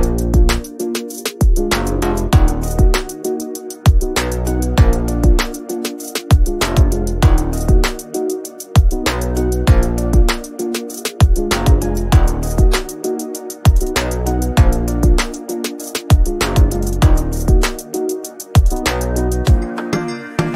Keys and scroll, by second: 5.2 ctrl+g, 12.0 b, 20.0 Return.